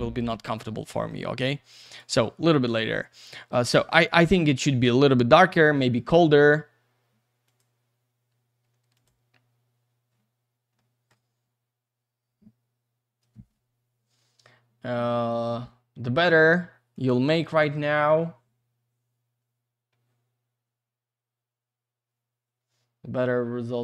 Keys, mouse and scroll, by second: 0.9 middle click, 1.7 click, 1.8 click, 1.9 double click, 5.4 click, 7.5 click, 8.9 click, 10.8 middle click, 11.3-12.3 scroll up 1, 12.3-13.0 scroll down 1, 17.1 click, 18.7-20.6 scroll up 1, 20.6-22.0 scroll down 1.